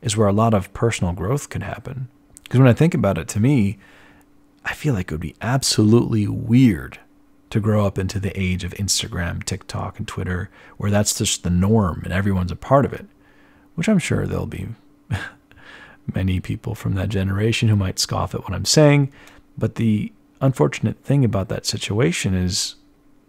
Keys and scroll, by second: 6.2 ctrl+alt+1.